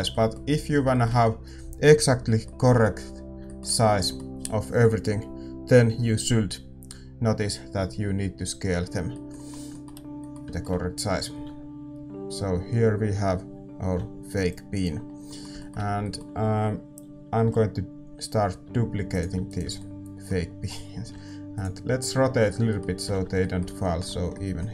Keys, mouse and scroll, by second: 14.4 alt+a, 14.4-18.4 drag, 16.0-18.4 middle drag, 18.4 alt+d, 19.4-24.7 right drag, 21.0-24.7 middle drag, 21.0 r.